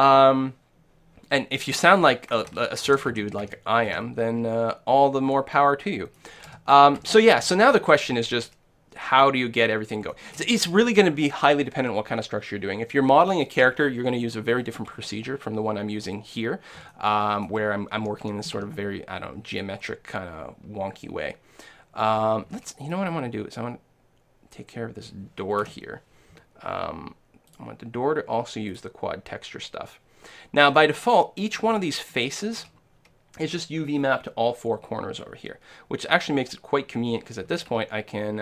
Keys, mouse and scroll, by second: 2.9 ctrl+z, 3.1 ctrl+z, 3.5 ctrl+z, 3.9 ctrl+z, 5.6 middle click, 6.5-7.0 a, 10.1-12.1 middle drag, 16.9-18.9 middle drag, 18.0 a, 18.3 a, 18.6 a, 19.5-21.5 right drag, 22.5 a, 22.8-24.8 right drag, 25.7 l, 27.5-29.3 drag, 30.6-35.2 middle drag, 37.5 a, 37.7 a.